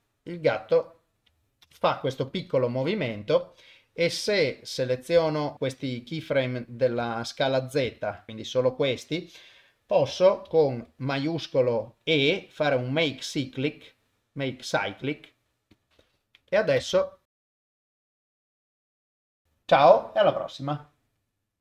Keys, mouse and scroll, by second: 1.7 shift+space, 2.7 shift+Left, 4.3 click, 5.2 a, 5.5 click, 6.5 click, 7.2 shift+click, 8.3-9.8 drag, 10.5 shift+e, 16.8 shift+space, 17.2 ctrl+alt+shift+F10.